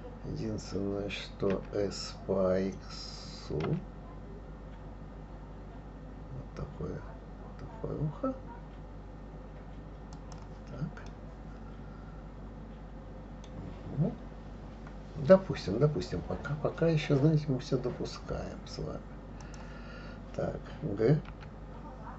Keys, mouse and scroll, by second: 1.5 s, 11.1-14.1 middle drag, 19.4 click, 21.3 g.